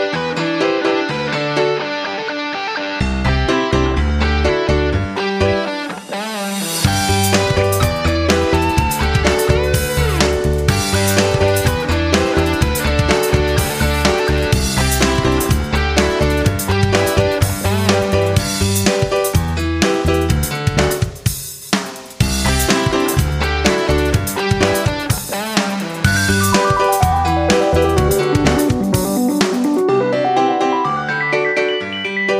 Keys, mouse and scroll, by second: 8.8-23.0 drag, 23.0 KP_1, 23.1 KP_5, 25.0-32.3 drag.